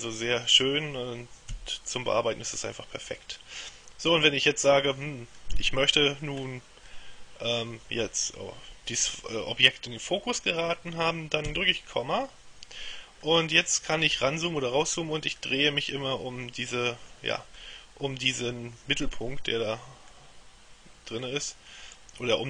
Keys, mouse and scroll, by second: 1.7 KP_3, 4.3-6.0 middle drag, 6.5-7.0 scroll up 2, 7.0 middle click, 11.6 KP_Decimal, 13.3-14.7 scroll up 1, 14.9-15.5 scroll up 1, 15.5-17.7 middle drag, 21.3-22.4 middle drag.